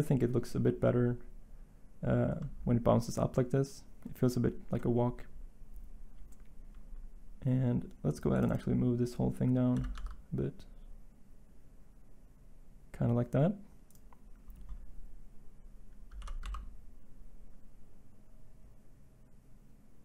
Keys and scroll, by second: 9.7 g, 9.9 y, 16.4 g.